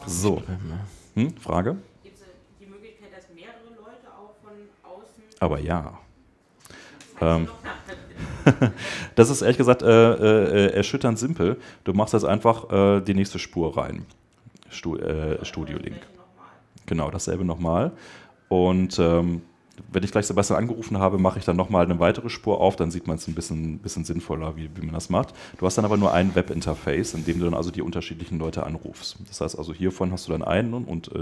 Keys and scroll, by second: 7.3 super+Tab, 10.2 super+Tab.